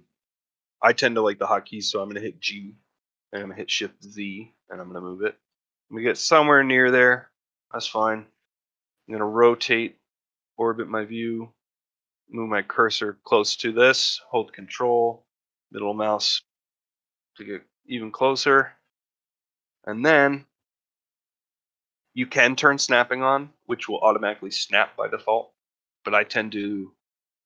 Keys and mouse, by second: 0.4 click, 2.3 g, 7.4-7.9 middle drag, 8.2-8.6 shift+middle drag, 8.9-9.5 middle drag, 9.8 shift+middle drag, 10.2-10.5 middle drag, 10.7-11.2 middle drag, 14.6-17.3 ctrl+middle drag, 17.4-18.3 ctrl+middle drag, 18.5-19.0 shift+middle drag, 19.3 ctrl+middle click, 19.5-19.9 shift+middle drag, 20.3 ctrl+middle click.